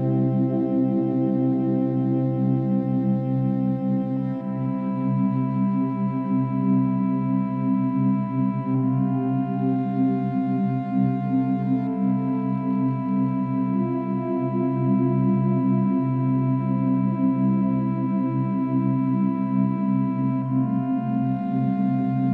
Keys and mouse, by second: 0.8-1.8 drag, 2.8-4.4 drag, 4.8-6.3 shift+drag, 6.4-6.8 alt+drag, 7.2 alt+click, 9.8-10.2 drag, 10.9-11.5 drag, 11.9 shift+click, 13.6 ctrl+z, 14.1-15.2 alt+drag, 18.7 click, 19.1 r, 19.4 x, 21.9-22.3 middle drag, 22.1-22.3 alt+drag.